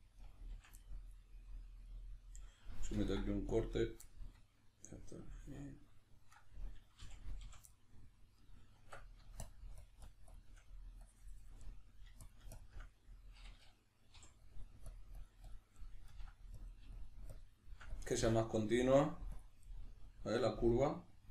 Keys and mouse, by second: 0.2 right click, 0.5 f, 0.8-6.3 middle drag, 2.9 ctrl+r, 3.8 right click, 6.3 right click, 7.0 f, 7.7-9.4 middle drag, 8.7 Tab, 9.4 shift+click, 11.6 middle click, 12.3 shift+click, 12.9 middle click, 14.5 click, 15.8 middle click, 16.6 click, 17.9 click, 18.6 middle click, 19.3 click, 19.7 middle click.